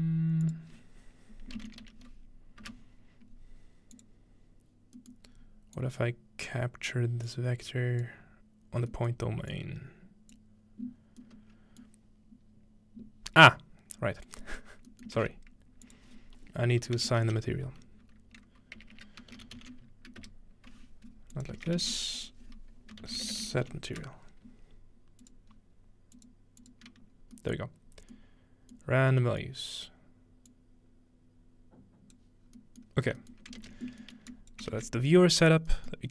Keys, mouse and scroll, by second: 2.6 Return, 4.6-11.9 drag, 11.2-13.2 middle drag, 13.5 scroll down 1, 14.3 click, 15.2 shift+a, 15.9-17.0 drag, 17.0-20.1 typing, 21.3 click, 21.6 typing, 22.2 click, 23.0-24.5 typing, 25.2-27.4 drag, 25.5-27.2 scroll up 1, 27.2-27.8 scroll down 2, 27.6 middle click, 27.8 scroll up 1, 28.9 middle click, 29.0 scroll up 1, 29.3-30.3 scroll down 3, 29.5-29.8 middle drag, 30.3 scroll down 1, 30.5-32.2 drag, 32.5-34.0 scroll down 3, 33.6 ctrl+space, 34.3-34.7 drag, 34.7 ctrl+x, 35.0-36.1 drag, 35.0-35.6 scroll down 1, 35.6 scroll up 1, 35.9-36.1 middle drag.